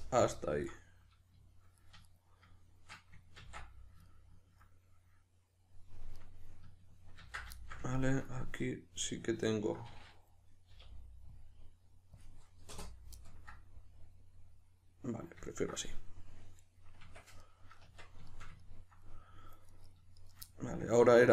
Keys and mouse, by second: 0.7 right click, 1.8 right click, 2.1 shift+right click, 3.4 ctrl+x, 4.1-6.2 ctrl+middle drag, 6.2 right click, 7.2 ctrl+x, 7.6-19.7 shift+middle drag, 10.7 k, 17.0 Tab, 17.8 Tab, 19.7 right click, 20.2 shift+right click, 20.5-21.3 middle drag.